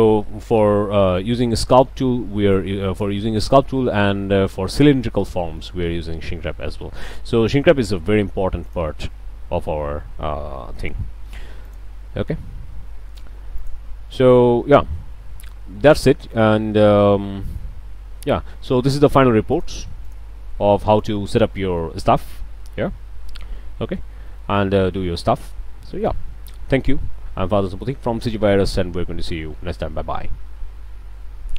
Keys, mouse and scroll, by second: 0.1-0.8 drag, 1.2 click, 2.5 click, 3.6-4.1 shift+drag, 4.1 shift+scroll down 1, 5.3 click, 8.7 drag, 11.6 click, 13.6 click, 14.6 scroll down 2, 15.3 middle drag, 16.3 drag, 18.9 drag, 19.5 drag, 20.1 drag, 20.9 drag, 21.6 click, 21.9 middle drag, 22.4 Tab, 22.6 scroll up 1, 22.8 click, 23.0 scroll down 3, 23.3-25.0 middle drag, 27.6 middle click, 27.7-28.5 drag.